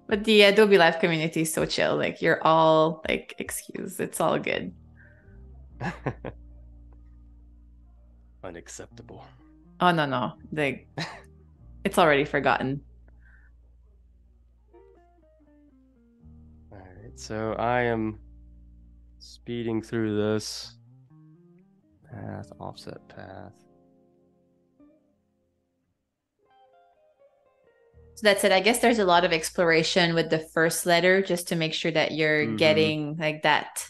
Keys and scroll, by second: 3.9 shift+m, 5.6 a, 7.9 super+c, 8.3 super+z, 11.3 super+z, 13.3 Delete, 15.0 super+f, 16.1 space, 25.6 Up, 26.1 Down, 30.0 Delete.